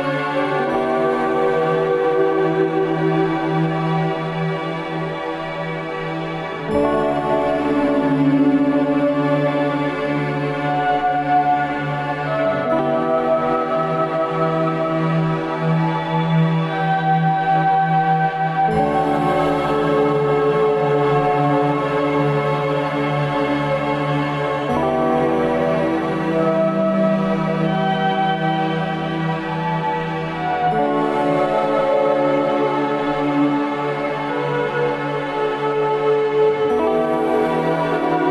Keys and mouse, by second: 0.3-1.0 middle drag, 1.4 click, 1.7 Tab, 3.3-4.2 middle drag, 6.9 middle click, 8.6 middle click, 10.0 middle click, 12.2 ctrl+r, 17.1 ctrl+r, 24.6-25.8 middle drag, 27.1 ctrl+r, 31.3 middle click.